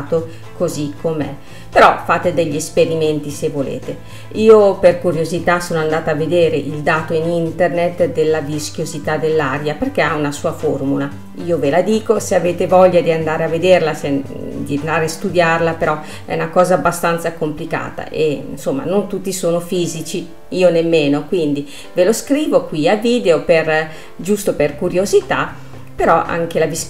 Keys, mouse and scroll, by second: 2.9-5.9 drag, 8.8-21.6 drag, 23.2-26.8 drag.